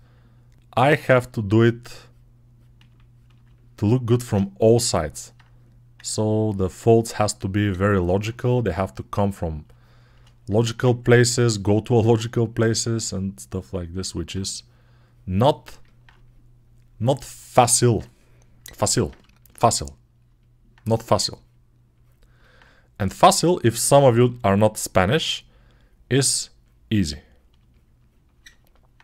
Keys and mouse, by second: 0.6 i, 6.3-7.6 shift+right drag, 7.7 alt+right click, 8.1-12.3 drag, 12.3-13.8 alt+right drag, 13.8-19.1 alt+drag, 23.0-29.0 ctrl+alt+drag.